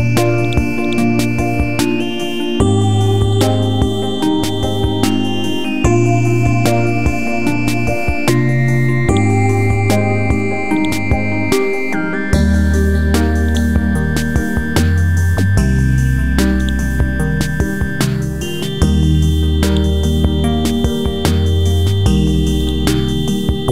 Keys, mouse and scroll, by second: 9.1-10.2 right drag, 10.8 click, 12.0 KP_5, 13.5-15.3 drag, 15.8-16.2 typing, 16.6-23.7 drag.